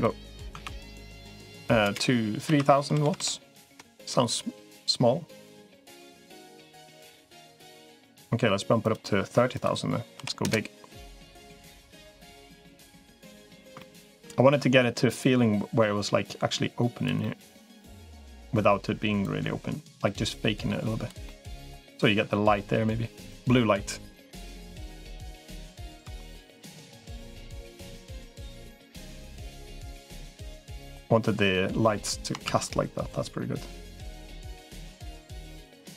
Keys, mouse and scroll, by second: 2.9 0, 3.1 0, 5.3-7.1 drag, 6.3-7.8 middle drag, 8.7-10.7 drag, 11.1-12.1 drag, 12.5 middle click, 13.6 shift+middle click, 15.1-16.9 drag, 17.0-18.2 middle drag, 19.1-20.9 drag, 21.1 middle click, 23.1 click, 25.5 middle click, 26.0 shift+middle click, 27.1-28.5 drag, 29.1-30.9 drag, 31.6 middle click, 32.3 shift+d, 32.9-35.9 drag.